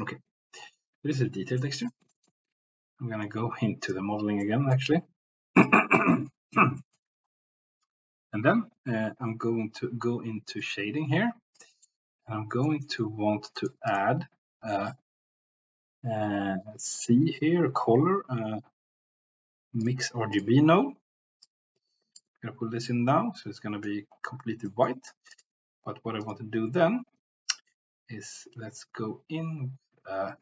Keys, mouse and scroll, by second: 1.6 middle click, 3.9 click, 4.4 middle click, 5.5 click, 6.0 middle click, 6.8 shift+middle click, 11.8 middle click, 12.9 middle click, 13.5 click, 13.9-20.4 drag, 21.4 click, 23.4 middle click, 24.8 middle click, 26.2-30.4 drag.